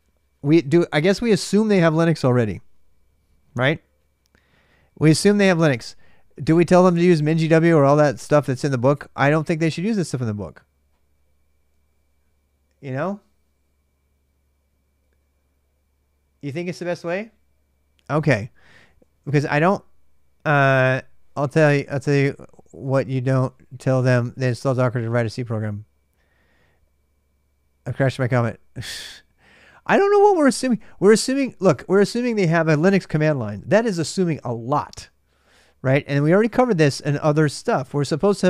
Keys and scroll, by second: 29.6-30.6 typing, 36.5 ctrl+a, 36.6 ctrl+a.